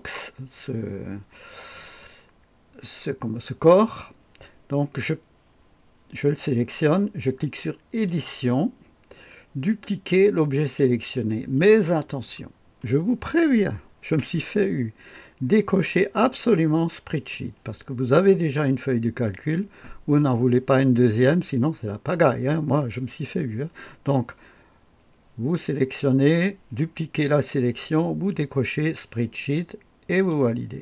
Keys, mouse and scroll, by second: 8.0 click, 10.4 click, 17.1 click, 30.0 click.